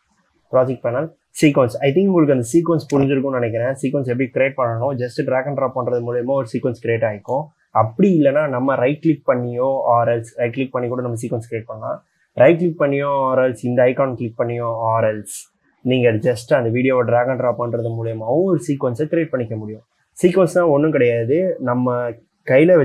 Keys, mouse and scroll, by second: 10.6 right click.